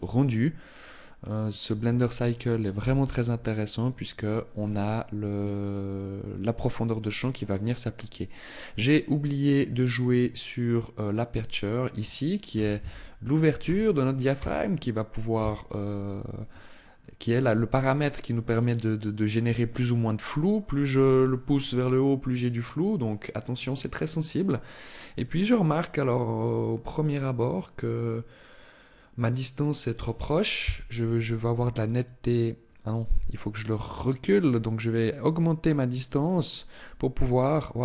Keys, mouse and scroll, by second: 10.9 click, 30.7-32.7 click, 33.1 click.